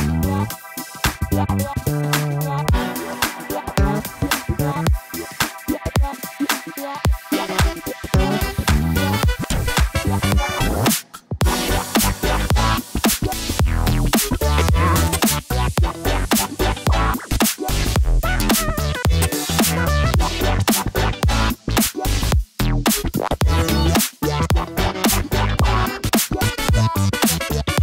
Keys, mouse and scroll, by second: 1.7 middle click, 2.7 Tab, 3.6 click, 4.9 g, 5.0 y, 6.2 click, 6.8 click, 7.7 middle click, 7.9 click, 9.3 Tab, 10.2-15.9 drag, 21.5-22.6 drag, 23.4-24.2 drag, 24.9 click, 25.1-26.4 drag, 26.7 click, 27.5-27.8 drag.